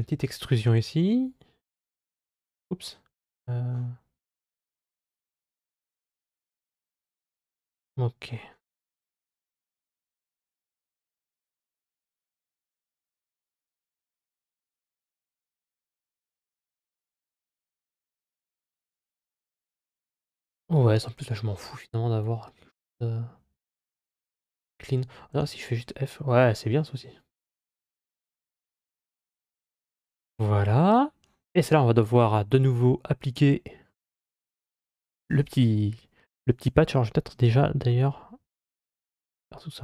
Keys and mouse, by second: 0.5 e, 4.3 click, 6.2 e, 16.8 alt+f, 19.5-23.9 middle drag, 24.4 ctrl+z, 25.2 f, 26.0 middle click, 28.1 shift+middle click, 28.4-29.8 middle drag, 32.4-33.7 middle drag, 36.4 g.